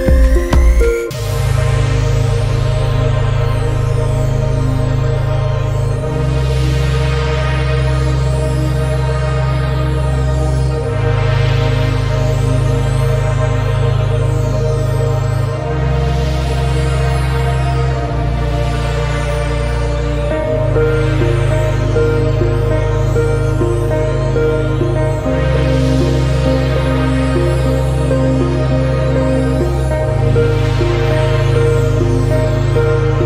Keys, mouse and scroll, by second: 0.2-0.6 scroll up 1, 0.6 alt+shift+right click, 1.0 a, 1.4 alt+shift+right click, 1.6 alt+shift+right click, 1.7 alt+shift+right click, 1.8 middle click, 2.0-2.5 scroll up 1, 2.5 alt+shift+right click, 2.8-3.1 scroll down 3, 3.1 shift+middle click, 3.3 scroll up 1, 3.9 alt+shift+right click, 4.2 scroll down 3, 4.3 middle click, 4.6 scroll up 2, 5.4 alt+shift+right click, 6.2 click, 6.6 click, 7.7 click, 8.4 scroll down 2, 8.5 middle click, 9.1 click, 9.4 middle click, 9.7 ctrl+s, 9.9-10.6 drag, 10.6-11.2 scroll down 1, 11.2-11.8 middle drag, 11.9 scroll up 3, 12.1-12.7 scroll down 2, 12.7 click, 13.2 ctrl+z, 13.9 click, 14.4 click, 14.6 middle drag, 14.8-15.1 scroll up 2, 15.1 shift+middle click, 15.4 click, 16.3 scroll down 1, 16.4 middle click, 17.0 a, 17.0 middle click, 17.5 right click, 17.8 Tab, 17.9-18.4 scroll up 1, 18.4 click, 18.7 a, 18.8 scroll up 1, 18.9 middle click, 19.5 alt+shift+right click, 19.7-22.9 typing, 19.9 ctrl+Tab, 20.3 alt+shift+right click, 20.9 middle click, 21.3 middle click, 23.3 click, 24.6 click, 24.8-25.2 scroll down 1, 25.2 Tab, 25.4 scroll down 1, 25.5 z, 25.6 middle click, 26.1 click, 26.6 scroll up 1, 26.9 a, 27.0 scroll down 1, 27.1 middle click, 27.4 right click, 27.5 Tab, 27.6 middle click, 28.0 Tab, 28.3 Tab, 29.2 scroll down 2, 29.3 middle click, 30.2 ctrl+s, 30.3 scroll up 1, 30.5 middle click.